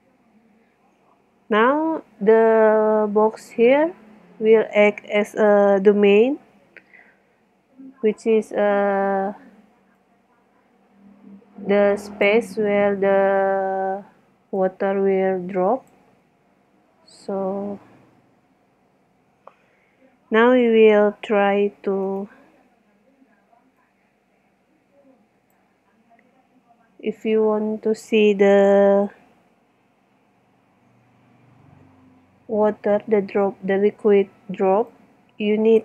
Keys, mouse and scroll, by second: 8.8 middle click, 10.1 middle click, 10.3 middle click, 10.7 middle click, 16.8 KP_1, 17.8 z, 22.1-23.3 right drag, 23.8 right click, 24.0 click, 34.9 right click.